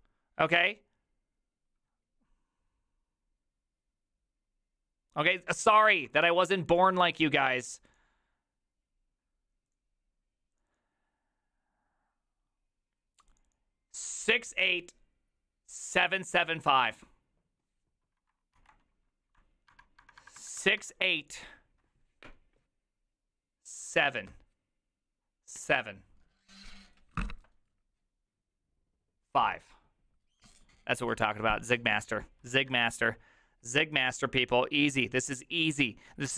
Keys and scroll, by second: 6.3 alt++, 18.6 alt+{.